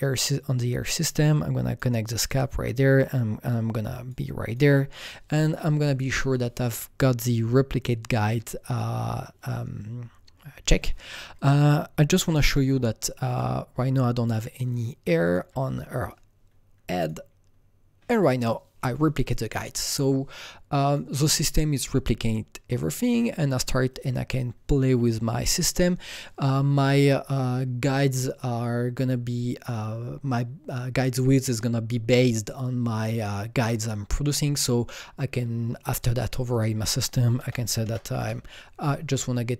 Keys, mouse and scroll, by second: 1.1-7.7 drag, 11.4 click, 12.2 u, 13.3 click, 14.2 click, 15.3 click, 15.3 click, 15.5 typing, 17.0 click, 19.3 u, 20.0 click, 20.0 u, 20.9 click, 22.9 click, 23.9-26.4 click, 36.4 click, 36.4 click, 37.4 double click, 37.4 KP_0, 37.7 KP_Decimal, 38.1 KP_1, 38.2 KP_Enter, 38.2 KP_0.